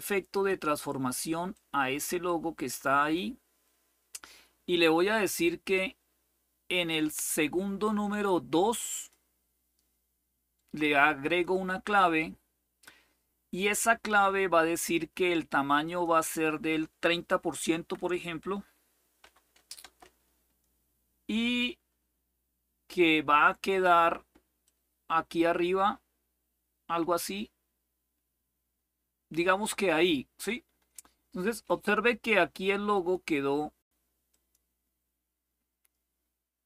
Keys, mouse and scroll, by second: 0.0 click, 1.2-2.9 drag, 5.4-8.9 drag, 11.0 click, 15.6 click, 16.2 click, 17.4 Delete, 17.8 Delete, 18.9 3, 19.5 Return, 24.3-30.2 drag, 32.6 click, 34.0 click.